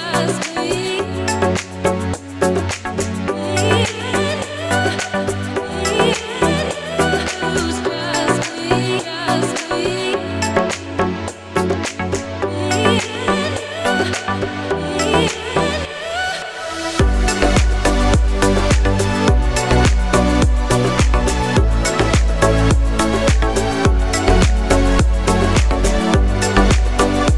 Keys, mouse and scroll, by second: 0.5 click, 1.1 shift+d, 1.7 click, 2.3 click, 2.6 shift+d, 3.7 click, 5.0 space, 24.7 click, 25.3 click, 25.9 click.